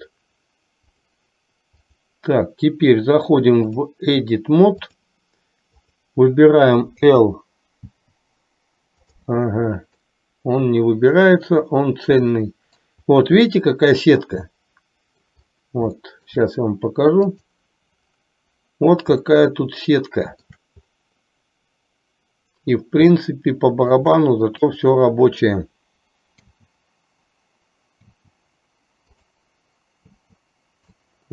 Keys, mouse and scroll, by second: 0.0 drag, 1.0 click, 2.0 click, 3.9-5.4 drag, 6.1 click, 7.1 l, 8.0 l, 9.2 click, 10.2-13.0 middle drag, 13.7-15.4 middle drag, 16.2 shift+middle click, 17.6 click, 19.4-20.6 shift+middle drag, 23.4 shift+middle click, 24.9 click, 26.5 l, 28.2 l, 29.2 click, 30.2 l, 31.1-31.3 middle drag.